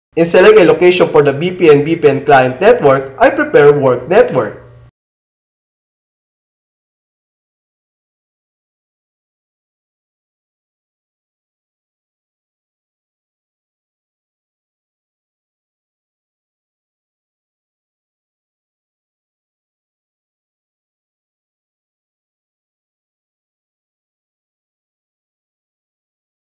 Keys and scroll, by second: 6.9 alt+c, 8.9 alt+space, 10.1 c, 12.1 alt+space, 14.1 c, 16.1 super+r, 18.4 Return.